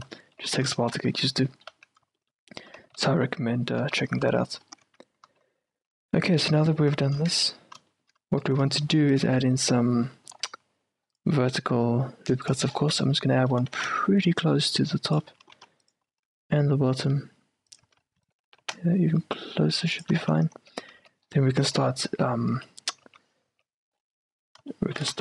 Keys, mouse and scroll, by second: 0.0-0.6 typing, 1.8 z, 2.9-6.6 typing, 7.4 Tab, 8.1-12.2 middle drag, 9.0 ctrl+r, 9.5 z, 10.4 ctrl+r, 12.9-15.4 middle drag, 13.7 g, 15.4 a, 15.6 ctrl+r, 18.0 a, 18.4-20.3 right drag, 18.6 g, 20.3-23.6 typing, 20.6 Tab, 21.3-23.5 middle drag, 24.0-25.2 middle drag.